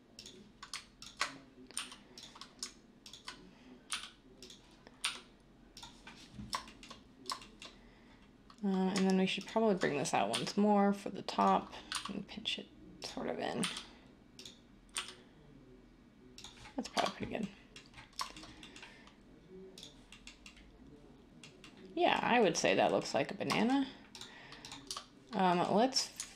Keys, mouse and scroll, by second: 1.7 g, 3.9 r, 5.0 g, 10.3 e, 11.9 s, 13.6 r, 14.9 g, 17.1 Tab, 24.8 Tab.